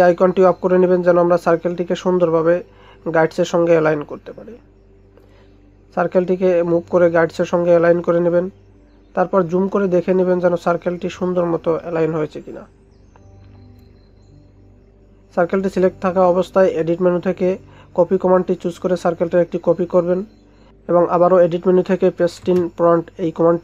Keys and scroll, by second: 8.8 ctrl+space, 15.0 ctrl+0.